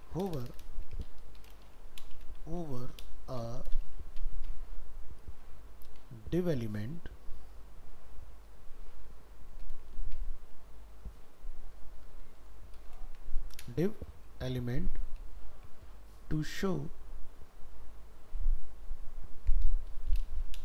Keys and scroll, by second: 8.9 ctrl+shift+Left, 10.8 ctrl+x, 11.0 ctrl+Left, 13.0 ctrl+v, 15.9 ctrl+shift+Left, 17.9 ctrl+shift+Right.